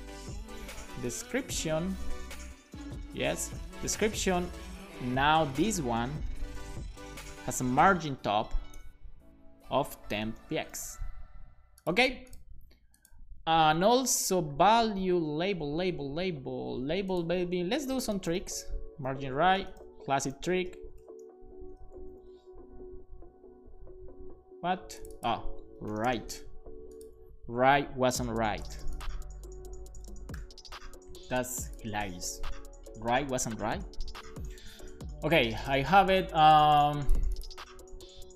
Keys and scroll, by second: 0.0-3.9 typing, 6.2-7.1 typing, 8.7 Return, 10.1-11.0 typing, 17.8-21.7 typing, 22.2 super+s, 25.6-26.7 typing, 29.9 BackSpace, 30.7 super+s.